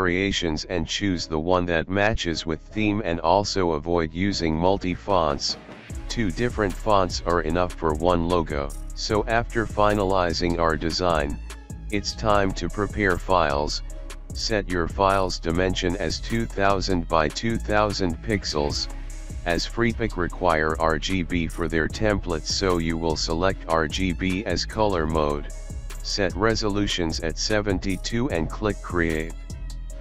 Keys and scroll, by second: 2.6 Right, 3.0 Right, 3.0 Left, 3.1 Left, 3.1 Left, 3.5 alt+space, 3.6 Delete, 4.0 alt+space, 5.2 ctrl+a, 6.6 alt+space, 7.6 space, 8.4 alt+space, 8.4 alt+space, 9.3 alt+space, 9.7 typing, 10.8 space, 11.8 ctrl+a, 12.2 space, 12.4 space, 12.5 ctrl+n, 18.5 ctrl+a, 18.9 ctrl+KP_2, 19.1 ctrl+KP_0, 20.8 ctrl+KP_2, 20.9 ctrl+KP_0.